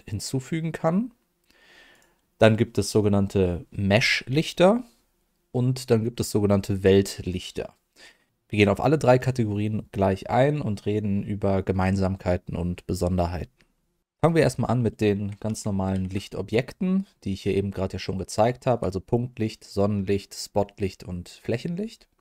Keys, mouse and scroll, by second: 1.9 click, 15.8 shift+a.